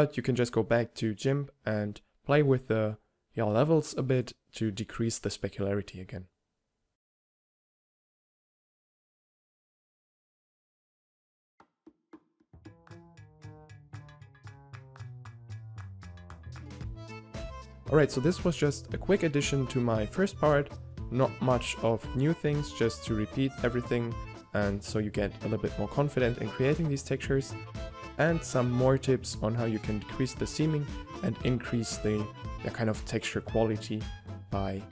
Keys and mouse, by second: 0.6 right click, 1.2 middle click, 1.6 click, 2.6 g, 4.9 g, 5.9-6.7 middle drag, 6.7-7.8 right drag, 7.1 g, 8.4-8.9 right drag, 8.9 middle click, 9.4 right click, 10.9 click, 11.0 g, 12.1 a, 13.5 middle click, 13.9 middle drag, 14.1 middle drag, 14.5 middle drag, 14.7 middle click, 15.2 a, 15.7 a, 15.9 n, 17.1 n, 19.6-20.0 middle drag, 21.1 middle click, 22.1 middle click, 22.4-23.9 middle drag, 24.8-27.2 middle drag, 27.3-28.9 right drag, 27.4 g, 28.2 g, 28.7 a, 30.5-33.0 middle drag, 33.0-34.9 typing.